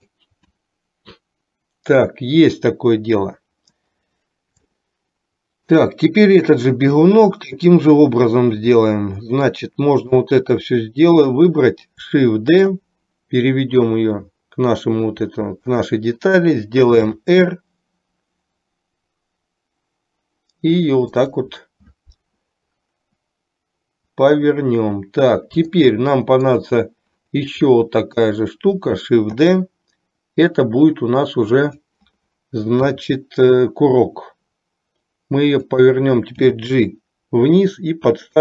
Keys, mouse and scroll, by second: 4.7-6.0 shift+middle drag, 9.9 click, 12.7 shift+d, 17.2 r, 25.9 shift+middle click, 28.0 click, 29.5 shift+d, 33.0 r, 36.5 g.